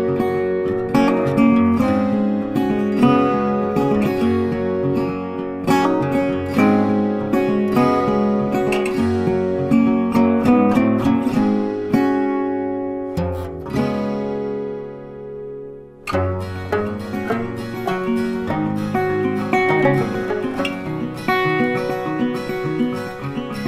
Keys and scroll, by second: 15.8 ctrl+t.